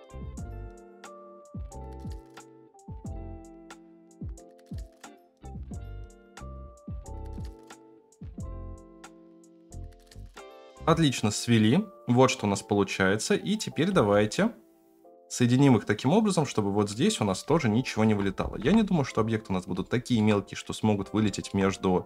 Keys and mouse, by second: 0.2 click, 0.6 shift+click, 1.4 click, 1.8 shift+click, 2.5 click, 2.9 shift+click, 3.0 middle click, 3.2 shift+click, 3.3 alt+z, 3.4 shift+middle click, 3.6 shift+click, 3.8 KP_0, 4.3 shift+click, 4.7 ctrl+z, 4.7 middle click, 5.0 middle click, 5.2 shift+right click, 5.5 KP_0, 5.8 shift+right click, 6.3 alt+z, 6.4 alt+z, 6.5 shift+middle click, 6.6 middle click, 6.8 alt+z, 6.8-10.3 typing, 7.0 middle click, 8.1 middle click, 8.5 shift+middle click, 9.5 ctrl+z, 13.9 space, 16.9-17.2 middle drag, 17.5-18.0 shift+middle drag, 18.5 KP_0, 19.5-20.1 shift+middle drag, 21.2 middle drag.